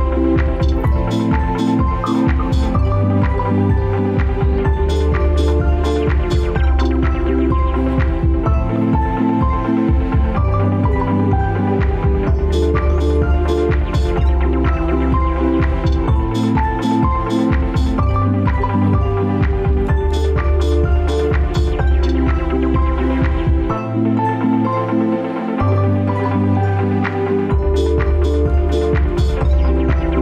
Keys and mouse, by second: 1.8-8.5 drag, 14.1-14.7 middle drag, 14.9 Tab, 15.9-16.3 middle drag, 17.0 right click, 18.5-20.8 middle drag, 21.1 ctrl+s, 22.3-23.4 middle drag, 24.3 click, 25.0-25.4 shift+middle drag, 25.7-27.1 middle drag, 27.5 click, 29.4 click.